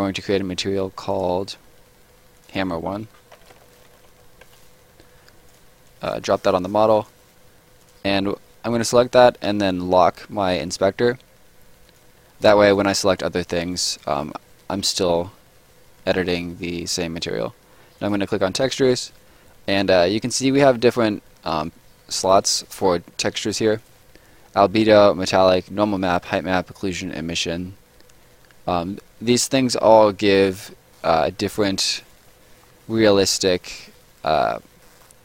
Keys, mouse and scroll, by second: 0.1 right click, 1.1 click, 2.9 shift+click, 3.0-4.6 typing, 5.5 click, 11.8 click, 13.4 click, 17.9 click, 21.6 click, 30.3 right click, 30.6 scroll up 1, 30.9 middle click, 31.2 scroll up 1, 31.4 right click, 31.7 scroll down 1, 31.9 right click, 32.2-32.8 scroll down 2, 32.4 middle click, 33.2 right click, 33.6 scroll down 1, 33.7 middle click, 35.0 scroll up 1.